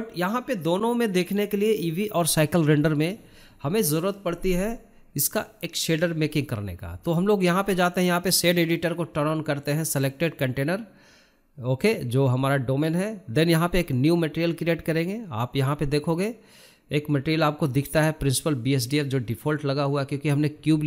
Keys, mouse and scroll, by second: 6.1-11.9 drag, 11.9 scroll down 2, 12.2-12.5 scroll up 2, 12.5-13.6 middle drag, 13.6-15.4 drag, 15.4 KP_Decimal, 16.0-16.6 scroll up 1, 16.6 shift+middle click, 17.2-17.9 scroll up 1, 17.9-20.4 drag, 20.4-20.8 scroll up 2.